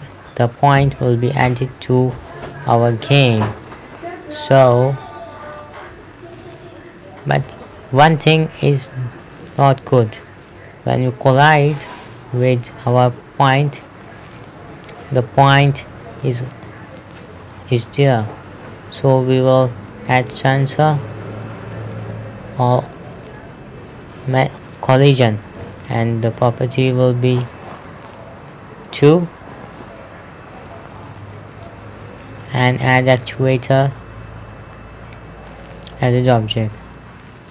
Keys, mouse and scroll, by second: 0.0-2.0 typing, 5.4 Escape, 12.2 click, 14.1 right click, 17.8 middle click, 18.5 scroll up 1, 20.6 click, 25.3 click, 29.4 KP_2, 29.8 Return, 32.0 click, 36.5 click.